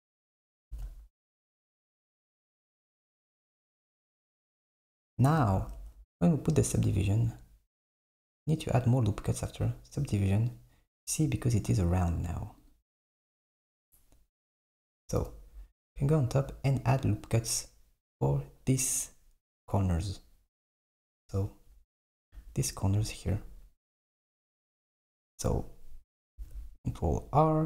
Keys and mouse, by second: 0.7 ctrl+b, 5.5 s, 5.8 Tab, 9.5 click, 12.7-15.3 drag, 15.3 KP_7, 20.8 click, 24.3 Tab, 26.3 r.